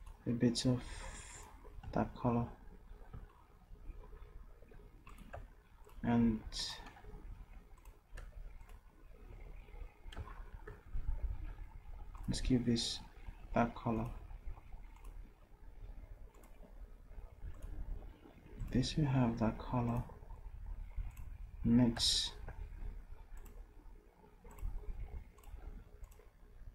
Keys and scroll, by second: 7.1 v.